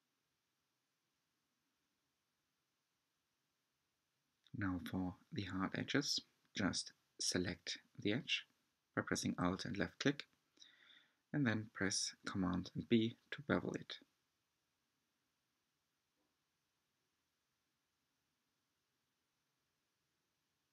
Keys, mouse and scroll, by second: 0.0 shift+middle click, 0.3-0.7 scroll up 9, 0.9 shift+middle click, 1.4 scroll up 1, 1.6 shift+middle click, 1.9-2.6 scroll up 1, 2.8 b, 6.0 alt+click, 6.7 b, 10.0 right click, 10.8 r, 13.6 shift+middle click, 14.1 Tab, 14.7 drag, 16.2 alt+a, 17.1 click, 17.6 click, 17.9 ctrl+a, 18.9 Tab, 19.3 scroll up 3, 20.4 alt+click.